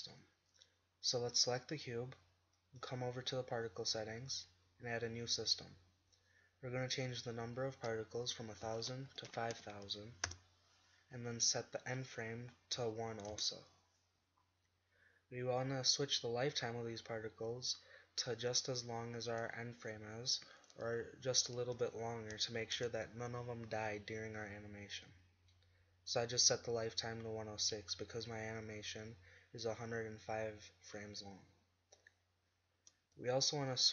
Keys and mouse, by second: 0.5-2.2 right drag, 8.9 middle click, 9.3 0, 13.5-14.3 drag, 14.3 middle drag, 14.5-16.7 drag, 16.7-18.4 middle drag, 18.4 click, 20.2-23.2 middle drag, 24.6-25.6 middle drag, 33.4 middle click.